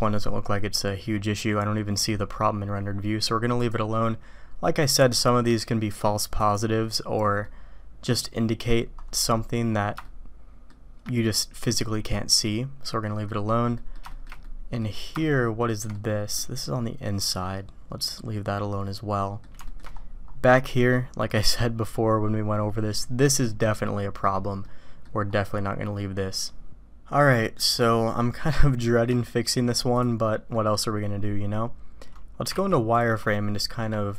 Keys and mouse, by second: 3.7-6.8 drag, 9.3 click, 10.0-10.6 shift+drag, 12.1-13.3 middle drag, 13.8 middle click, 14.1 shift+middle drag, 14.4-14.8 middle drag, 15.2-15.8 shift+drag, 15.9 click, 17.5-18.8 drag, 18.8 middle click, 18.9-19.4 drag, 19.6 shift+middle drag, 20.7 middle click, 24.5-25.0 middle drag, 26.8-27.6 middle drag, 28.1 middle drag, 29.2-29.5 shift+middle drag, 29.9 click, 30.2 middle click, 32.7 alt+v, 33.3 shift+click.